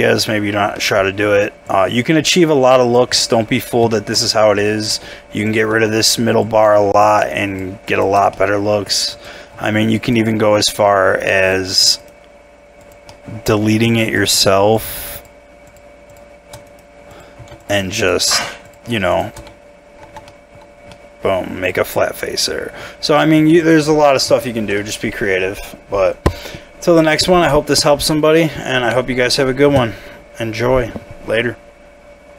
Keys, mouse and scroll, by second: 0.4 scroll down 1, 0.8 middle click, 3.9 shift+middle click, 4.2 shift+scroll up 2, 4.9 middle click, 5.7 Tab, 7.0 shift+click, 8.3 middle click, 10.6 shift+click, 12.0 right click, 13.1 middle click, 14.0 shift+click, 16.6 shift+right click, 17.6 double click, 18.0 shift+click, 18.3 f, 19.3 shift+f, 20.0 Tab, 20.2 middle click, 21.1 middle click, 23.0 scroll down 1, 23.1 middle click, 24.4 shift+middle click, 25.6 scroll down 1, 26.0-26.4 scroll up 1, 26.4-28.4 scroll down 1.